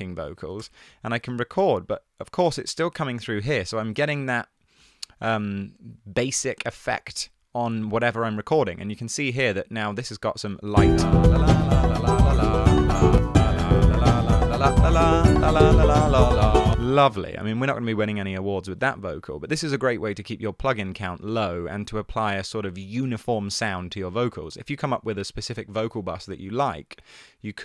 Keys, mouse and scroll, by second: 0.1 Down, 0.3 Down, 0.6 BackSpace, 1.8 typing, 10.0 e, 13.2 space, 16.7 space.